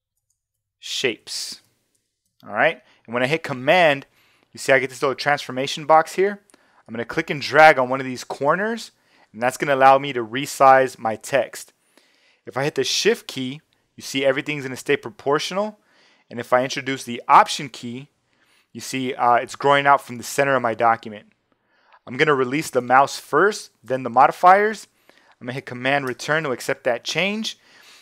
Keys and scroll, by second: 0.2 shift+Return, 0.5-2.3 typing, 26.1 shift+super+Return.